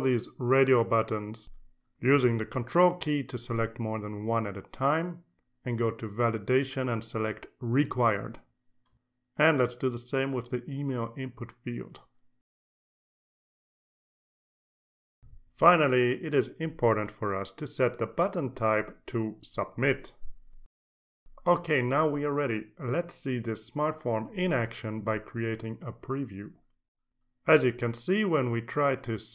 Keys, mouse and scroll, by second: 0.6 ctrl+click, 1.3 ctrl+click, 1.7 ctrl+click, 2.3 ctrl+click, 2.7 ctrl+click, 3.3 ctrl+click, 3.7-7.7 ctrl+drag, 8.4-12.5 drag, 13.3 click, 14.5 click, 18.6 click, 20.2 click, 21.2-27.5 drag.